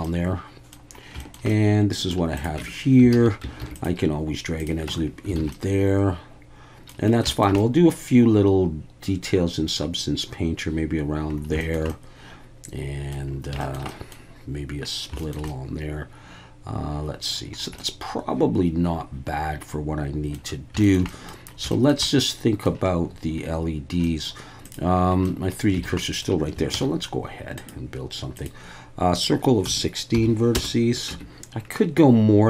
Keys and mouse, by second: 0.0-0.7 middle drag, 1.2 shift+middle click, 1.5-2.1 middle drag, 2.6 Tab, 3.1 alt+a, 3.6 ctrl+r, 4.6 click, 4.9 Tab, 5.4 alt+a, 5.5-6.9 middle drag, 7.3 shift+middle drag, 7.6-9.7 middle drag, 11.6 shift+middle click, 11.9-13.1 middle drag, 13.6 shift+middle click, 13.9 middle drag, 15.2 shift+middle click, 15.5-17.3 middle drag, 17.8-20.3 middle drag, 20.8 shift+middle click, 21.1 middle drag, 21.7 shift+middle click, 22.1-22.7 middle drag, 24.0 middle click, 24.6 click, 25.2 middle drag, 25.9 alt+a, 26.0 middle click, 26.7 shift+a, 29.1-31.3 drag, 31.1 Tab.